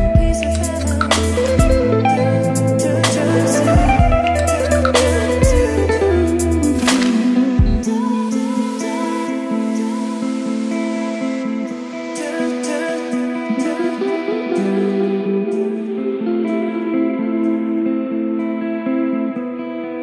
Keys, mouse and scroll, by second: 5.3-9.8 drag, 12.0-14.2 drag.